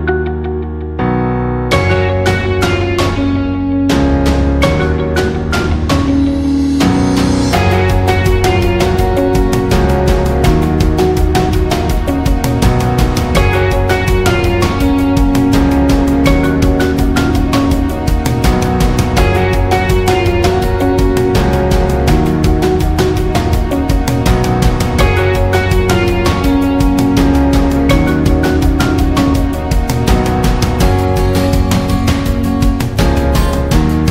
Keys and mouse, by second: 2.1 right click, 3.3 right click, 3.5 g, 5.4 right click, 5.8 e, 7.5 right click, 8.1 shift+right click, 10.3 middle click, 11.3 shift+middle click, 12.8 alt+right click, 13.2 middle click, 13.8 middle click, 14.4 g, 19.3 middle click, 19.8 w, 21.2 middle click, 22.0 f, 22.4 middle click, 23.6 k, 29.0 right click, 29.2 g, 30.8 k.